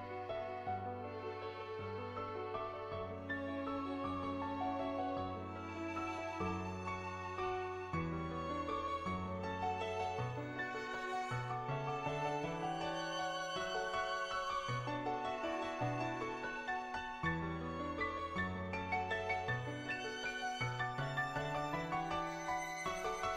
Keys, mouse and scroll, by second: 2.7 middle click, 3.4 scroll up 1, 3.9 shift+middle click, 4.3 middle click, 5.5 shift+middle click, 6.0 shift+middle click, 6.3 shift+middle click, 6.8 shift+middle click, 7.9 shift+middle click, 8.6 shift+middle click, 9.0 shift+middle click, 9.3-19.0 shift+middle drag, 19.0-20.6 drag, 20.9 shift+a, 22.4 Tab.